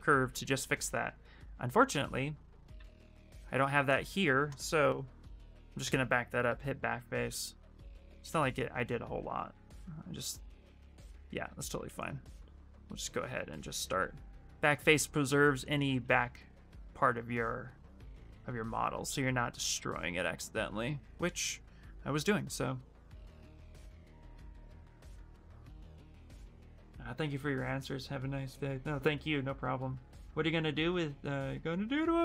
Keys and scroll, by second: 2.3-3.5 typing, 8.9 s, 11.2 s.